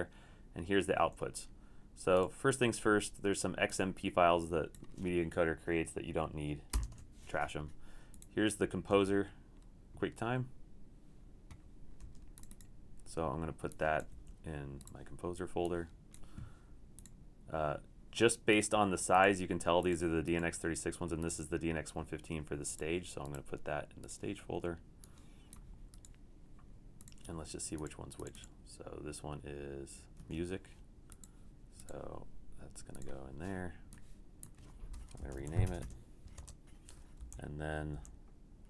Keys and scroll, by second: 1.0 super+2, 6.8 super+BackSpace, 14.1 super+3, 30.2 super+q, 35.3 Return, 35.4 Right, 35.6 BackSpace, 35.8 BackSpace, 36.4 KP_Enter, 37.2 Left, 37.9 Left.